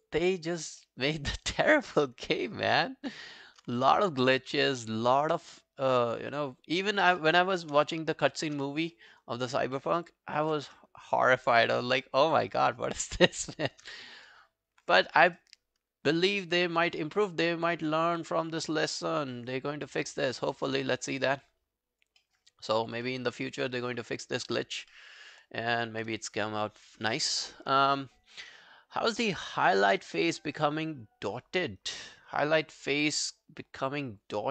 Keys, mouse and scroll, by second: 0.1 alt+click, 0.5 alt+right click, 0.8 alt+middle click, 1.1 alt+right click, 1.8 alt+scroll down 1, 2.0 alt+middle click, 3.0 alt+scroll down 1, 4.3 shift+click, 4.7 alt+scroll down 1, 5.0 alt+click, 6.3 alt+right click, 6.7 alt+click, 6.9 alt+right click, 7.2 alt+middle click, 7.4 alt+right click, 8.3 shift+click, 8.6 scroll down 2, 8.9 alt+middle click, 9.1 alt+right click, 9.4 alt+click, 9.8 alt+middle click, 11.5 shift+right click, 14.1 alt+middle click, 14.3 alt+right click, 17.7 alt+scroll down 1, 17.9 alt+click, 18.3 right click, 19.5 right click, 20.9 double click, 21.2 alt+scroll down 1, 21.4 alt+click, 22.2 alt+middle click, 22.5 alt+scroll down 1, 22.8 alt+click, 23.1 alt+middle click, 23.4 alt+scroll up 4, 23.7 alt+middle click, 23.9 alt+scroll down 1, 24.2 alt+click, 24.9 alt+middle click, 25.3-25.6 alt+scroll down 1, 25.6 alt+click, 33.9 alt+scroll down 1, 34.2 alt+click.